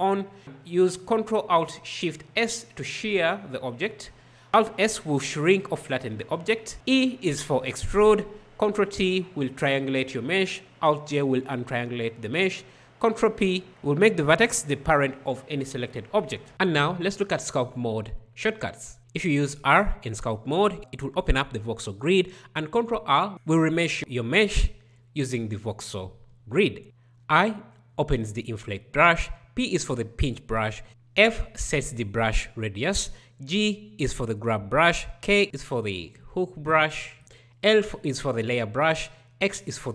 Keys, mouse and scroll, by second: 0.4 ctrl+alt+shift+s, 5.1 alt+s, 7.0 e, 8.5 ctrl+t, 11.1 alt+j, 12.7 ctrl+p, 18.8 r, 22.4 ctrl+r, 26.7 i, 29.4 p, 31.3 f, 33.4 g, 35.2 k, 37.9 l, 39.5 x.